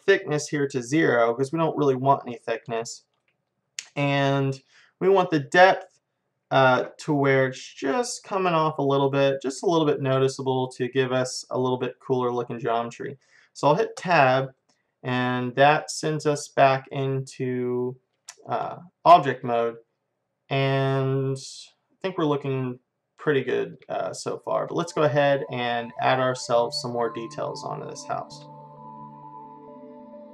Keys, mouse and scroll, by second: 2.9-4.1 middle drag, 4.7-6.7 drag, 10.3-14.0 middle drag, 14.0 Tab, 14.6-17.7 middle drag, 18.1-21.5 middle drag, 23.7-28.5 middle drag, 29.7 t.